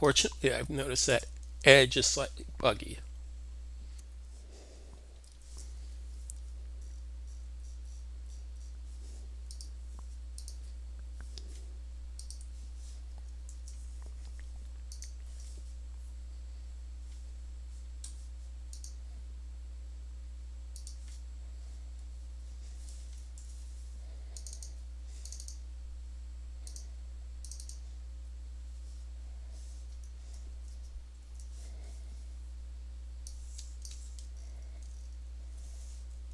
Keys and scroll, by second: 3.8 alt+super+q, 3.8 typing, 5.1 Escape, 13.3 alt+super+d, 23.2 super+d, 31.1 super+e.